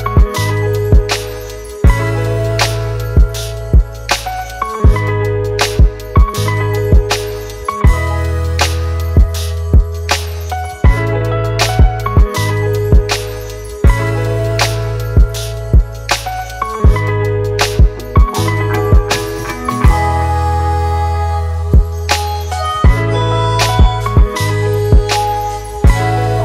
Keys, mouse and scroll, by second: 1.9 ctrl+t, 2.6 alt+shift+click, 7.1 alt+shift+click, 10.8 Return, 12.2 Right, 12.4 Right, 12.8 Right, 13.0 Right, 13.5 Right, 13.7 Right.